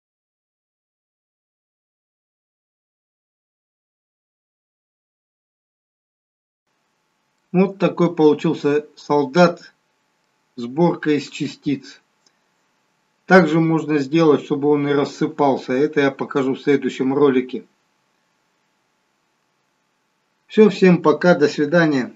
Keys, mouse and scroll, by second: 3.1 click, 3.6 click, 4.1 click, 5.8-6.4 scroll up 8, 6.5 middle click, 6.7-7.3 scroll down 2, 7.9 middle click.